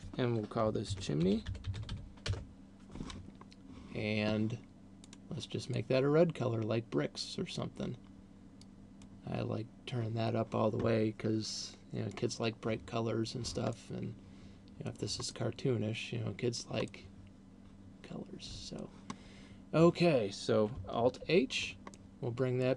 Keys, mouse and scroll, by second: 0.0 click, 5.2 click, 11.7 click, 13.0-13.7 scroll down 3, 14.0 middle click, 15.7 middle click, 17.0 middle click, 19.5 scroll down 2, 21.5 alt+h, 22.2 middle click.